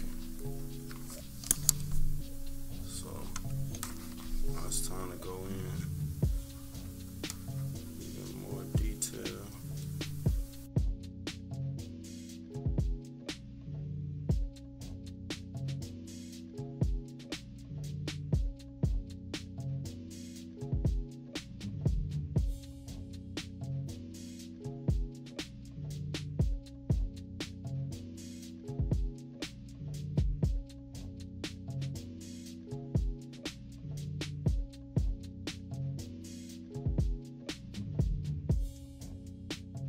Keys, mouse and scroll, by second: 0.2-0.9 scroll up 3, 0.9 scroll down 2, 3.3 click, 7.1-11.9 drag, 12.2-16.1 drag, 16.4 -, 16.7 =, 16.9 scroll up 2, 17.3-20.6 drag, 20.6 -, 20.8-21.2 scroll up 4, 20.8 =, 21.5-23.7 drag, 23.8 scroll up 2, 24.1-25.5 drag, 25.8 -, 25.9 scroll down 2, 26.0 =, 26.2 =, 26.6-27.1 scroll up 4, 26.8 =, 27.5-28.8 drag, 29.2-30.3 typing, 30.2-30.5 scroll down 4, 31.6-36.0 drag, 36.3 -, 36.5 =, 36.7 scroll up 2, 37.3-39.8 drag.